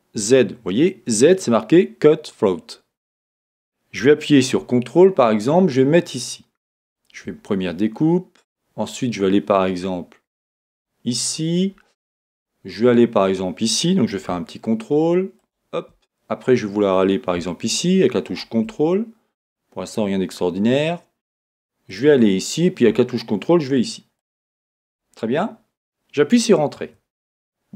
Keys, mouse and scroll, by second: 26.9 Return.